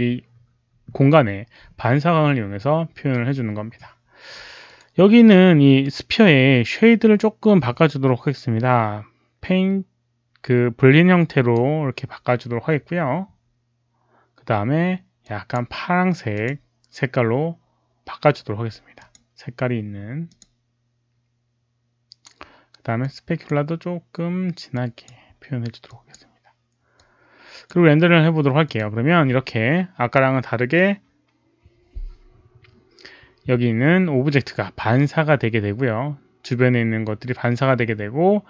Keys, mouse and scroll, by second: 4.6 click, 5.9-11.7 right drag, 15.1 click, 16.3 click, 16.4 right click, 18.9 click, 20.2 click, 22.9 click, 24.7 drag, 25.8 click, 26.9 click, 28.6 click, 33.7 click.